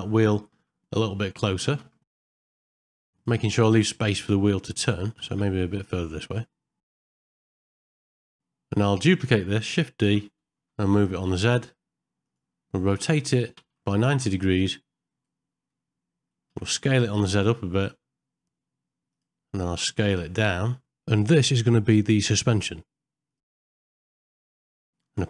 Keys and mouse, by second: 0.1 middle click, 1.6 g, 7.7 middle click, 8.0 shift+middle click, 8.2 ctrl+middle click, 10.1 shift+d, 12.9 r, 22.0 middle click, 24.3 middle click, 24.8 ctrl+middle click, 25.0 ctrl+a.